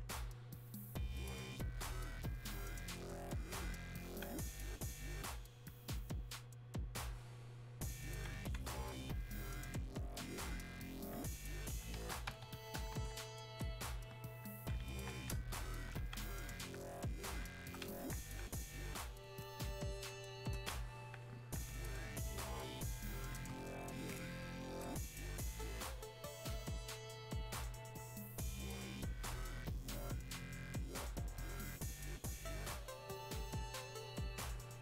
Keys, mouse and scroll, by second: 13.4-15.0 drag, 16.5-18.0 drag, 18.0-21.0 alt+drag, 21.0 alt+click, 21.1 alt+right click, 22.1-24.0 alt+drag, 28.5-34.8 shift+drag.